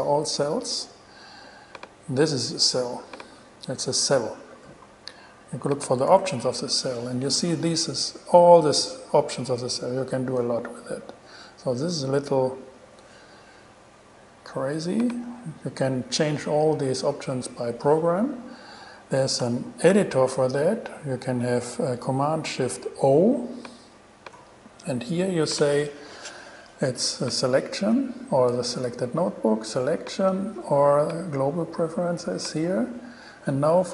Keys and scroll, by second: 0.7 shift+super+e, 3.4 shift+super+e, 4.7 shift+super+e, 6.4 shift+Return, 15.5 BackSpace, 20.1 shift+super+o.